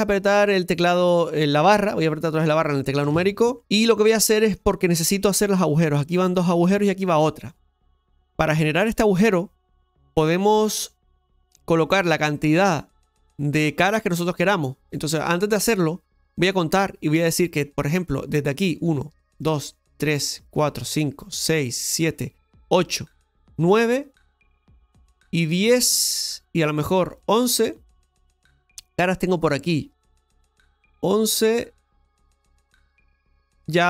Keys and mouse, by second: 3.0 KP_Divide, 3.8 shift+middle click, 18.4 right click, 19.3 shift+right click, 20.0 shift+right click, 20.4 shift+right click, 20.8 shift+right click, 21.4 shift+right click, 21.9 shift+right click, 22.6 shift+right click, 23.7 shift+right click, 25.6 shift+right click, 30.9-32.4 shift+middle drag.